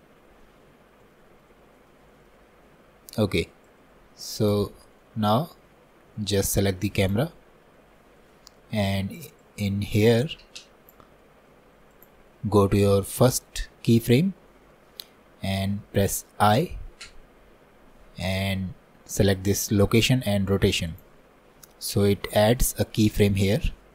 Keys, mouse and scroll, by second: 0.4 scroll up 1, 1.2 shift+middle click, 1.6-1.9 scroll down 1, 1.9-3.7 middle drag, 3.7-5.0 drag, 5.0 middle click, 5.5-6.2 scroll up 3, 6.2 shift+middle click, 7.1-8.3 drag, 9.4-14.7 drag, 14.7-23.9 middle drag.